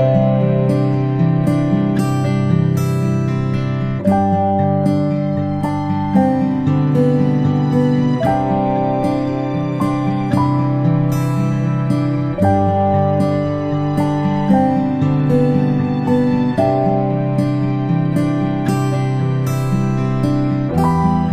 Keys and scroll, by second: 6.7-7.5 typing.